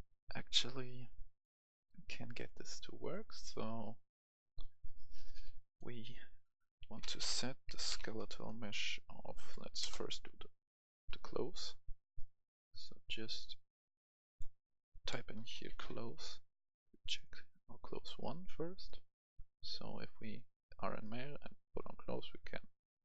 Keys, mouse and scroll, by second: 1.0 right click, 3.8-6.4 drag, 6.8-8.0 typing, 9.4 Down, 10.5 Return, 10.6-13.4 drag, 15.1-15.8 typing, 17.1 click, 22.4 Escape, 22.8 right click.